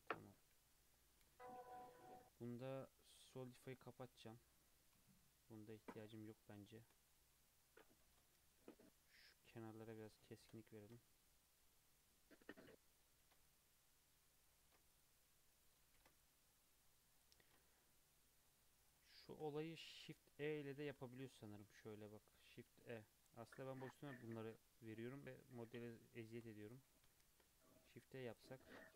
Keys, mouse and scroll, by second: 0.1 Tab, 0.5 alt+z, 0.7 scroll down 2, 0.9 middle drag, 1.2 alt+z, 1.6-3.9 middle drag, 3.9-5.2 drag, 5.2 KP_3, 5.5 scroll up 1, 5.8 Tab, 6.1 alt+z, 6.3-8.0 scroll up 8, 6.6 shift+middle click, 8.0 ctrl+r, 10.3 shift+middle click, 10.8 ctrl+r, 13.2 ctrl+r, 14.6 ctrl+r, 15.9 ctrl+r, 17.4 ctrl+r, 19.1 shift+middle click, 19.9 alt+click, 20.7 shift+e, 25.8 shift+middle click, 26.7 alt+click, 27.3 shift+e, 28.6-28.9 shift+middle drag.